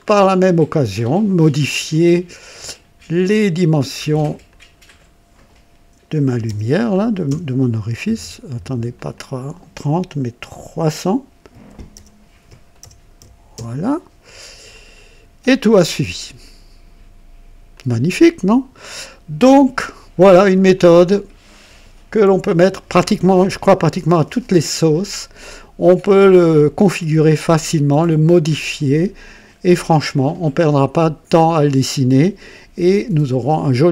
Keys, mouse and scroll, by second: 2.3 click, 2.5 typing, 2.7 click, 4.4 click, 6.1 KP_3, 6.4 KP_0, 7.2 Return, 8.9 click, 11.6 alt+KP_3, 11.9 KP_0, 12.8 alt+KP_0, 13.5 Return, 14.7 click, 15.8-16.6 drag, 17.7-19.1 drag, 20.7-21.7 drag, 23.8 click, 25.0-26.5 drag, 26.8-29.7 drag, 30.8 right click, 31.6 click.